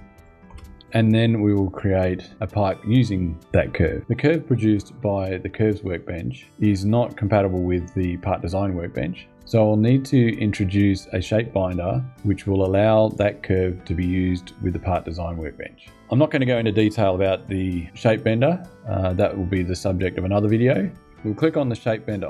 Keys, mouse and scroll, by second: 0.2 space, 21.8 click.